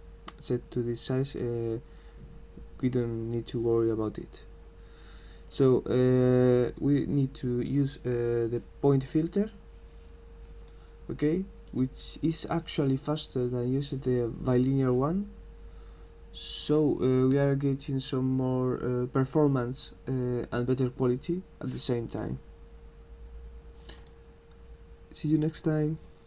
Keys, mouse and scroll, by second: 5.5 click, 6.7 click, 10.6 click, 11.7 click, 24.0 click, 26.1 click.